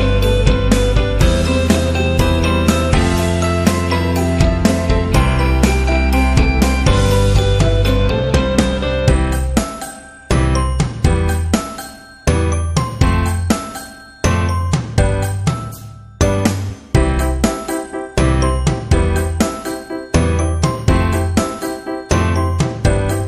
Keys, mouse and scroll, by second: 0.7 Left, 1.3 Up, 2.0 click, 3.6 click, 4.9 click, 5.6-6.5 scroll up 2, 7.2 click, 8.3 click, 8.8 Down, 9.2 click, 10.1 click, 10.3 Up, 10.8 Up, 14.7 click, 17.1 click, 20.3 click, 22.6 click.